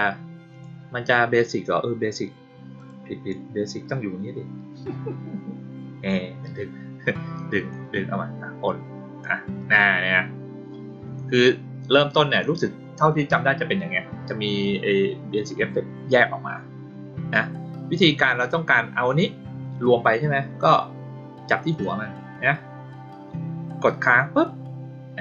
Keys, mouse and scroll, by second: 0.5 click, 2.7 click, 3.8-6.0 drag, 7.6-9.3 drag, 21.6 click, 24.1-25.2 drag.